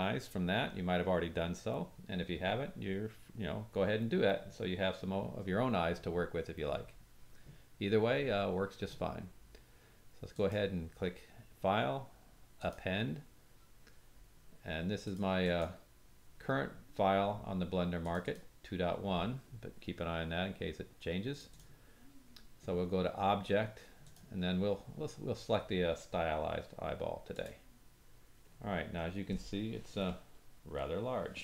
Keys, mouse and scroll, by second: 11.3-30.3 drag, 16.3-28.4 middle drag, 16.3-28.4 right drag, 28.4-28.9 scroll down 3, 28.9-30.0 scroll up 1, 31.0-31.4 shift+middle drag.